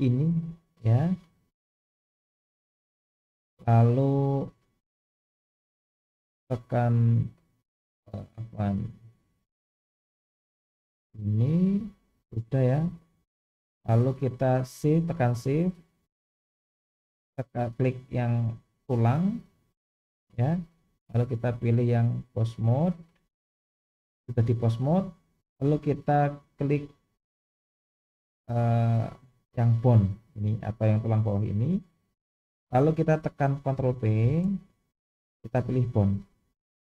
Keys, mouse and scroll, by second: 0.5-2.9 middle drag, 6.9-7.9 drag, 12.4-13.9 middle drag, 19.0 shift+click, 21.3-22.8 drag, 27.9 click, 29.4-29.9 middle drag, 34.2 ctrl+p.